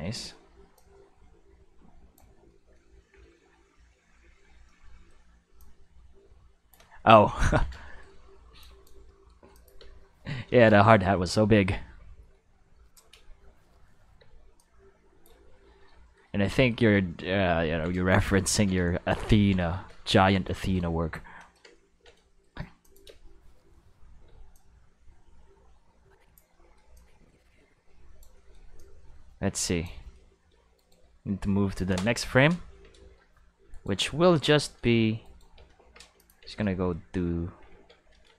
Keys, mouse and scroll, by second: 0.7-2.1 drag, 4.6 middle click, 5.6-6.7 drag, 7.4 ctrl+s, 7.9 shift+middle click, 8.6 drag, 9.2 middle click, 9.5 click, 9.7 space, 10.2 space, 11.3-12.9 drag, 13.1 space, 14.2 space, 14.5-15.2 drag, 17.2 ctrl+middle drag, 18.0 shift+middle drag, 18.4 ctrl+middle click, 18.9 shift+middle drag, 19.4 ctrl+middle drag, 19.7 shift+middle drag, 20.1-20.8 ctrl+middle drag, 21.9 ctrl+middle drag, 22.8 click, 23.0 space, 24.2 space, 24.5-26.3 drag, 26.9-28.2 drag, 28.7-29.8 drag, 30.7 click, 30.7 right click, 35.2 right click, 35.8 shift+d, 36.1 click, 36.4 shift+s.